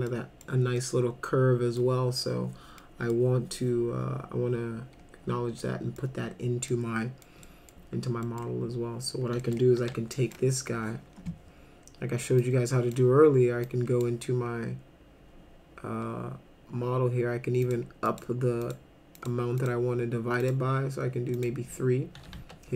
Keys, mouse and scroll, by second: 0.1 middle click, 0.8-1.8 middle drag, 2.1-2.5 scroll down 2, 2.8 middle click, 4.0-4.5 scroll down 2, 5.6 middle click, 6.7-7.3 middle drag, 7.4 middle drag, 8.2 middle click, 9.4 middle click, 9.8 2, 10.2 click, 12.4-12.9 drag, 13.7 click, 17.7 click, 18.1 click, 18.6 click, 19.2 click, 19.6 click, 20.4 click, 21.4 click, 22.4 1.